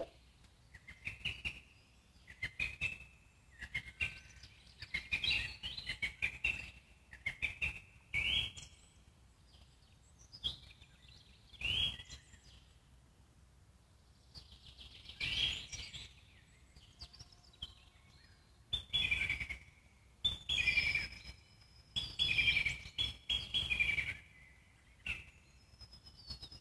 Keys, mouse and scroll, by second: 0.0 z, 1.6 click, 2.2 z, 4.0-5.7 alt+middle drag, 5.7 click, 6.5 g, 7.6 alt+middle click, 8.0 click, 10.0 scroll down 2, 10.2 click, 10.4-12.0 alt+middle drag, 12.0 z, 12.4 click, 12.9 z, 13.2 alt+middle click, 13.6 g, 14.6-16.1 alt+middle drag, 16.4 click, 16.7 z, 17.0 click, 18.0 g, 21.0 click, 21.4-22.5 alt+middle drag, 22.5 z, 22.7 click, 23.1 z, 26.4 click.